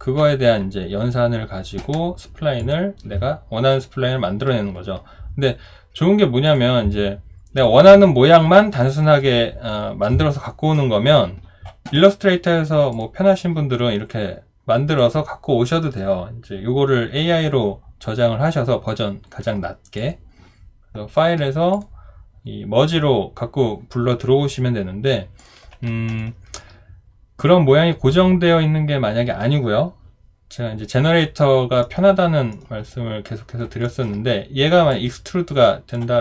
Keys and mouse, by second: 26.2 alt+right click, 32.9 alt+right click, 33.8 alt+middle click.